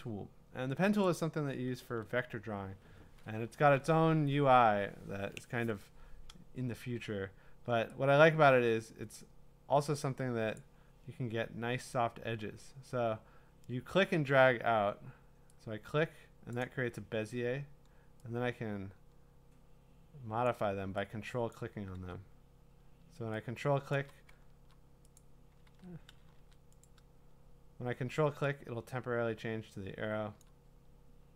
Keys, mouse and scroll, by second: 1.1 click, 10.5 click, 16.5 click, 20.4 ctrl+click, 21.5 ctrl+click, 21.9 ctrl+z, 23.9 ctrl+click, 25.2 click, 25.7 ctrl+z, 26.4 a, 26.9 click, 30.4 ctrl+click.